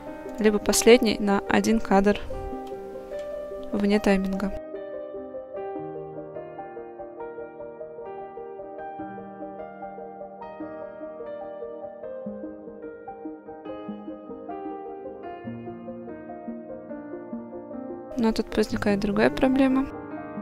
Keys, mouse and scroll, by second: 0.4 click, 3.2 g, 5.2 click, 6.7 middle click, 8.1 click, 10.0 click, 10.7 click, 12.2-12.9 scroll down 1, 13.1-13.6 shift+middle drag, 14.8-16.9 middle drag, 18.7 click.